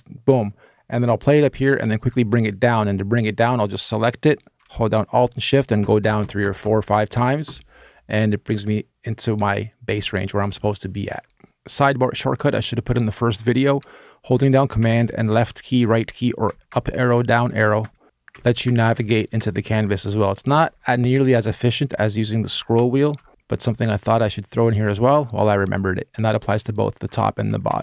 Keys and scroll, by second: 14.6 super+Right, 14.7 super+Right, 15.1 super+Left, 15.2 super+Left, 16.2 super+Up, 16.5 super+Up, 16.9 super+Down, 17.1 super+Down, 17.6 super+Up, 17.6 super+Down, 18.1 super+Up, 18.1 super+Down, 18.4 super+Up, 18.7 super+Right, 18.8 super+Right, 19.1 super+Right, 19.1 super+Down, 19.3 super+Down, 19.6 super+Up, 19.7 super+Up, 19.9 super+Left, 20.0 super+Left, 20.3 super+Down, 20.4 super+Down, 20.7 super+Up, 20.9 super+Up, 21.0 super+Right, 21.1 super+Right, 27.2 alt+Right.